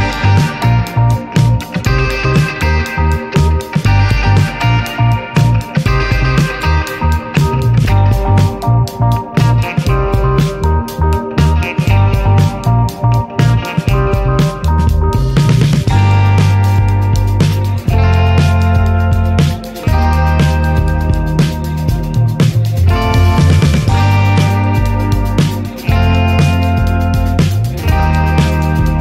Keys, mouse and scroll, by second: 3.0-4.9 drag, 4.9 middle click, 5.1-5.9 scroll up 1, 5.9-6.5 scroll up 1, 6.5 click, 6.8 click, 7.1-9.8 drag, 9.8 ctrl+z, 11.7-18.6 drag, 18.8-19.6 middle drag, 19.6 click, 21.5 click, 22.2 scroll down 2, 22.6-25.1 middle drag, 25.1-25.6 drag, 26.4 click, 26.5-27.7 middle drag, 26.8 ctrl+s, 27.7 ctrl+s, 27.7-28.8 scroll up 2, 28.9 click.